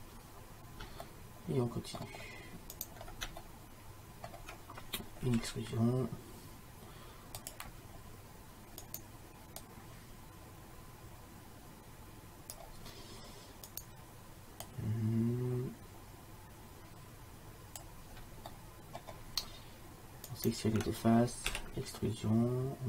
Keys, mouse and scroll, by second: 1.1 middle click, 2.8 middle click, 5.3 e, 8.9 right click, 10.7-11.8 drag, 13.8-15.5 right drag, 14.7-16.6 drag, 18.6 middle click, 20.4-22.4 right drag, 21.6 e.